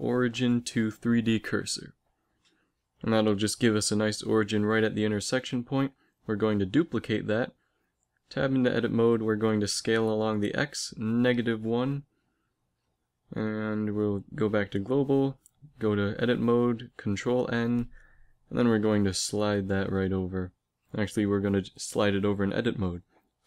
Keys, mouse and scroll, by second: 4.9 shift+d, 6.8 Tab, 7.2 a, 7.6 a, 9.1 s, 11.9 Tab, 13.8 alt+space, 15.5 Tab, 16.6 ctrl+n, 17.4 Tab, 18.3 g, 21.8 Tab, 22.5 g.